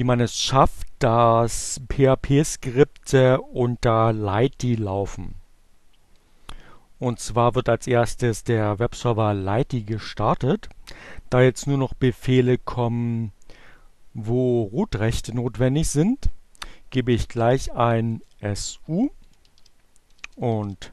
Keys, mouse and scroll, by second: 4.8-10.2 drag, 14.8 s, 17.3-20.6 typing, 17.6 Return.